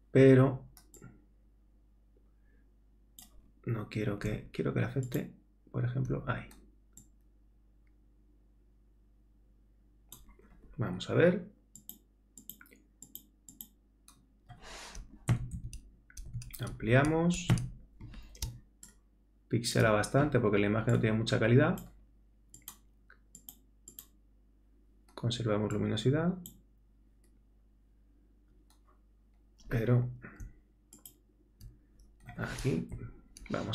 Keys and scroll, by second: 15.3 super++, 16.8 super+-, 17.5 super++, 18.4 super+space, 32.9 super+-.